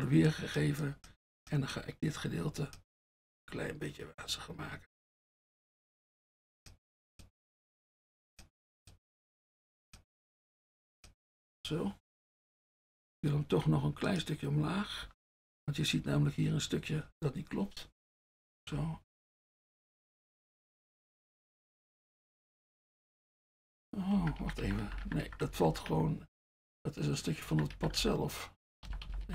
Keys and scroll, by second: 13.6 F1, 18.7 Down, 19.1 Down, 19.4 Down, 19.7 Down, 20.0 Down, 20.3 Down, 21.1 Down, 21.3 Down, 21.8 Down, 24.2 Up, 24.5 Up, 24.7 Up, 24.9 Up, 25.1-25.5 typing, 25.7 Up, 26.0 Up, 27.5 Up, 27.8 Up, 28.0 Up, 28.9 Down, 29.1 Down, 29.2-29.3 typing.